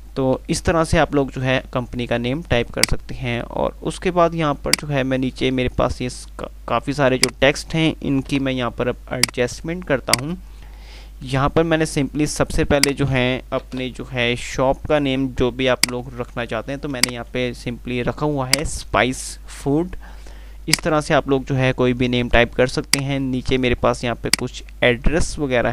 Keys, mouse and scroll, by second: 0.6 F3, 2.8-6.0 drag, 8.5 Page_Up, 9.4-10.8 drag, 12.0 F2, 13.9 Page_Up, 16.0 click, 17.5 c, 18.4 click, 19.8 F3, 21.0-23.6 drag.